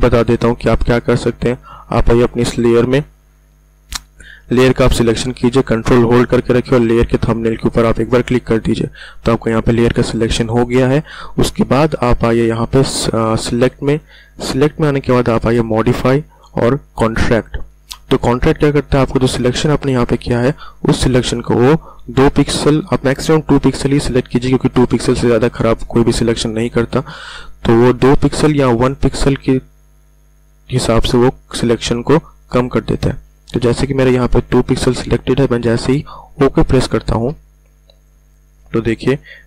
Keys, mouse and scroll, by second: 1.6 click, 13.4 click, 37.1 click.